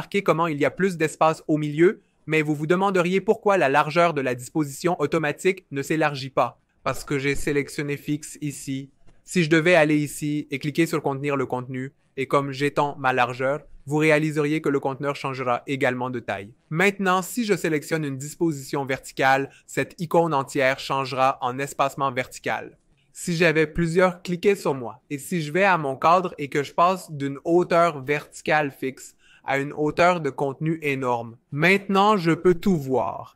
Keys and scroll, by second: 14.0 shift+Up, 14.1 shift+Up, 14.3 shift+Up, 14.8 shift+Down, 15.0 shift+Down, 15.2 shift+Down, 22.4 shift+Up, 22.6 shift+Up, 22.7 shift+Up, 24.0 super+d, 24.3 super+d, 24.5 super+d.